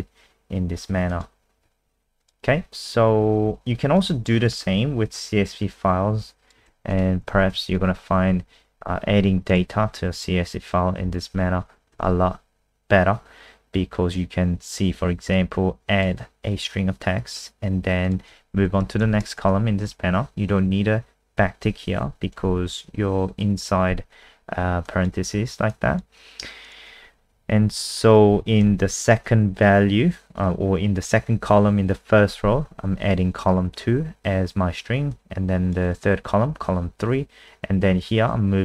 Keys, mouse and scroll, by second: 1.6 alt+F4, 2.2 click, 4.3-4.9 scroll down 5, 6.7 ctrl+c, 6.9 click, 7.3 ctrl+a, 7.5 ctrl+v, 9.5 click, 11.9 ctrl+s, 15.3 click, 18.7 Right, 21.3 Left, 22.3 BackSpace, 24.8 click, 27.4 ctrl+Right, 28.3 Right, 28.4 Right, 28.7 ctrl+shift+Left, 28.9 ctrl+shift+Left, 35.1 click.